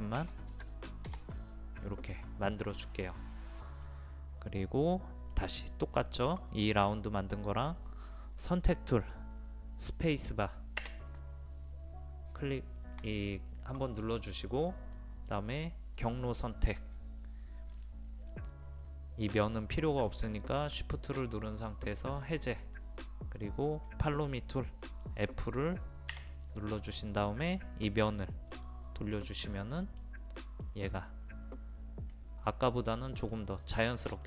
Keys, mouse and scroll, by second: 0.2 KP_1, 0.5 KP_0, 3.9-5.0 middle drag, 10.9 space, 15.0 middle click, 16.0 click, 22.0 shift+click, 26.1 f, 28.5 click, 29.2-34.2 middle drag.